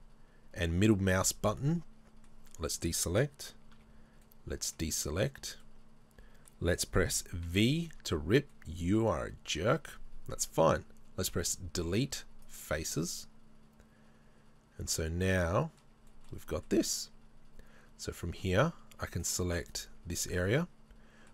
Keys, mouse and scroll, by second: 5.4 b, 5.6 middle click, 7.5 v, 8.6-11.2 middle drag, 11.2 Delete, 13.0-18.2 middle drag, 18.2 click, 19.2 alt+right click, 19.7 alt+right click, 20.2-21.3 middle drag.